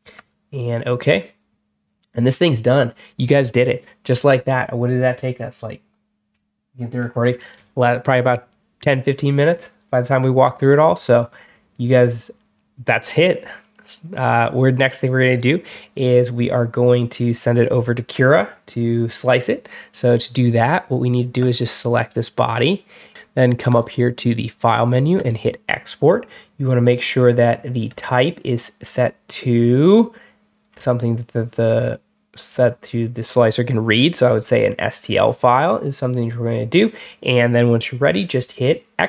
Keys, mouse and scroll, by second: 0.0 click, 11.3 click, 21.3 click, 21.8 right click, 23.6 click, 25.0 click, 27.7 click, 30.6 scroll down 1, 32.3 click.